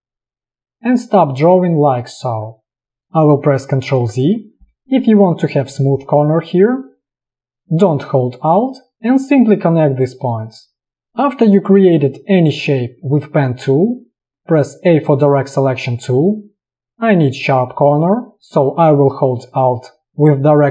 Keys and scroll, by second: 3.9 ctrl+z, 15.0 a.